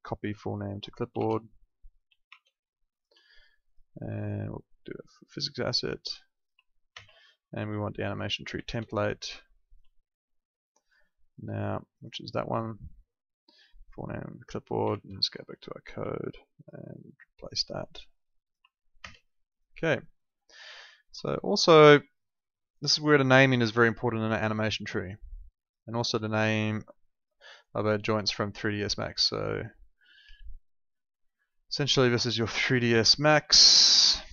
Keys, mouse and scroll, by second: 0.6 click, 1.1 alt+Tab, 2.3 alt+Tab, 2.9 alt+click, 3.6 click, 6.8 ctrl+v, 8.6 alt+Tab, 9.6 alt+click, 12.4 right click, 13.8 click, 14.8 alt+Tab, 15.8 alt+click, 19.0 ctrl+v, 21.7 ctrl+2.